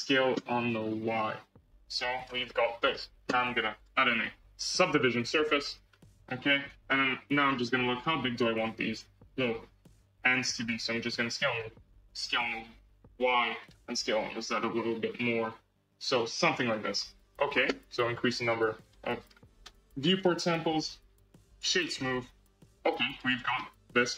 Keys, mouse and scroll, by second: 0.3 s, 2.4 middle click, 2.9 Tab, 3.7-5.8 drag, 5.8 scroll up 3, 6.7 Tab, 7.5-10.0 middle drag, 10.0 s, 10.9 s, 12.2 s, 16.5-18.7 middle drag, 18.7 click, 19.6 Tab, 20.0 right click, 20.8 Tab, 21.4-23.0 right drag, 23.0 click, 23.5-24.1 middle drag.